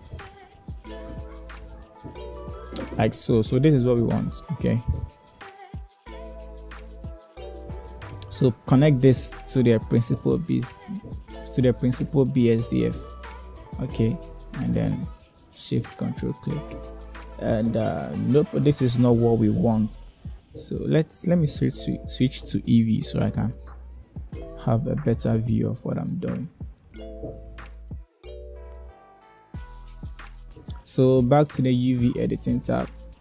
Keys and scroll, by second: 0.8 Return.